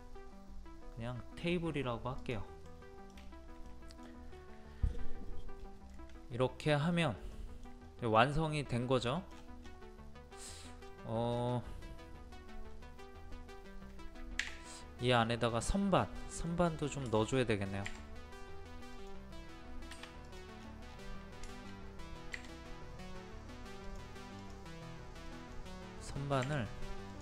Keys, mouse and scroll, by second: 2.6 middle click, 4.3-5.5 scroll up 1, 5.9 middle click, 6.9 scroll up 1, 7.3 middle click, 7.8 scroll up 1, 8.1 middle click, 9.0 scroll down 1, 9.6 scroll down 1, 9.7-10.4 scroll up 1, 10.4 click, 10.9-12.0 middle drag, 14.4 d, 14.7 middle click, 15.2 scroll up 1, 15.6 middle click, 16.1-17.0 scroll up 2, 16.2 middle click, 17.0 middle click, 17.4-17.9 scroll up 1, 18.9-20.0 drag, 20.0 click, 20.5-20.8 scroll down 1, 21.5 shift+middle click, 23.8 click, 25.3 middle click, 27.1 click.